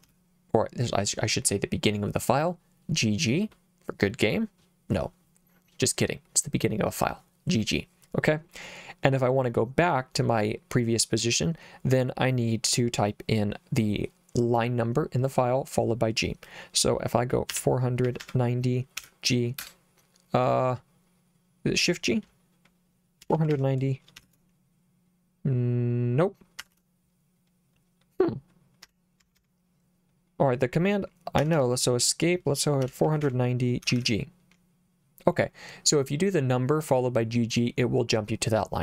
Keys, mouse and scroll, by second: 0.0 g, 17.5-19.0 typing, 19.6 Return, 23.0-24.0 typing, 24.2 ctrl+shift+g, 26.6 Escape, 28.6-29.9 typing, 31.4 Escape, 32.6-34.0 typing.